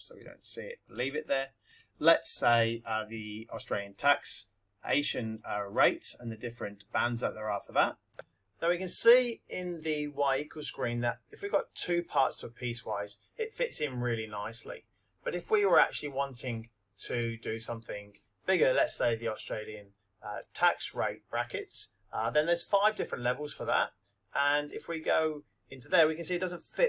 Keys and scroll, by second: 0.1 Return, 0.8 Down, 1.6 Right, 8.1 Down, 21.6 Right, 22.3 Right, 23.5 Down, 24.7 Return.